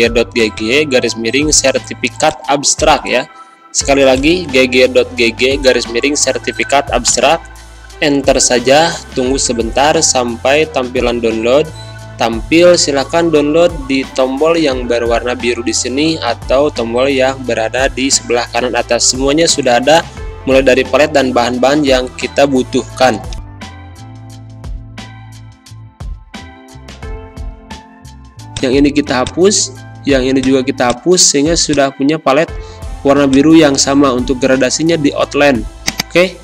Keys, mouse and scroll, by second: 28.3-36.4 drag.